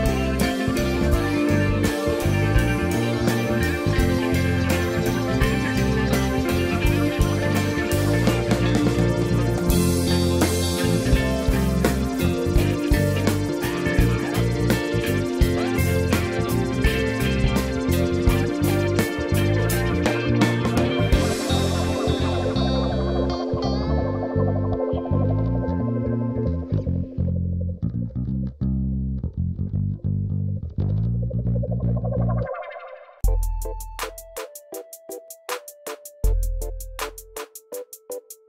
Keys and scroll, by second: 34.1 BackSpace.